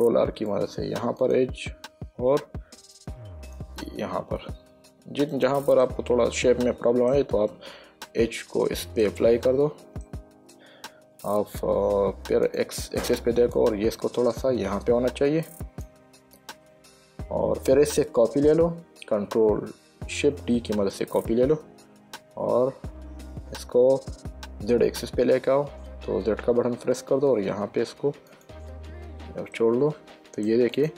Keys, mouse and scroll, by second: 0.3 ctrl+r, 0.8 click, 2.5 ctrl+r, 3.3 click, 4.7 Tab, 5.7 click, 6.1 middle click, 7.8 Tab, 8.4 middle click, 10.3 middle click, 12.8 click, 13.9 click, 18.3 shift+middle click, 19.7 shift+d, 26.1-27.0 typing, 28.6 click, 29.9 middle click.